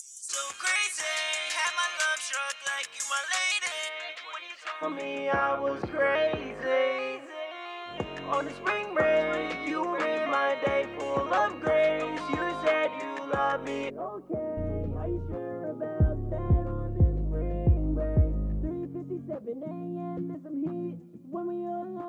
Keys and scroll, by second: 17.6 super+s.